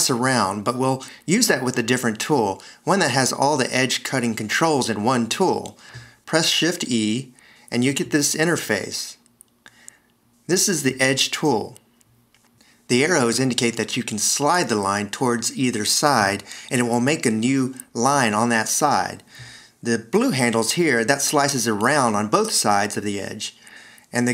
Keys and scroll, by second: 7.5 shift+e.